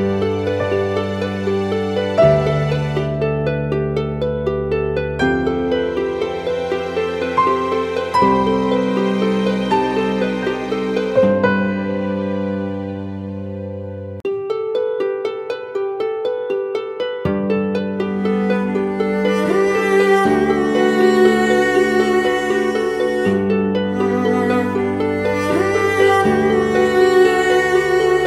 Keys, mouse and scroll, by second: 8.0-9.1 typing, 24.1 alt+click.